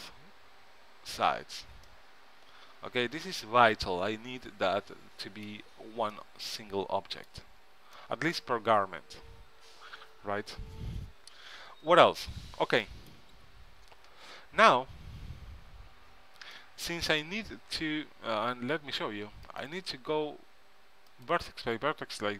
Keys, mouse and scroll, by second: 1.8 a, 2.3-4.3 middle drag, 6.3-10.9 middle drag, 14.8 KP_3, 19.6-21.6 drag.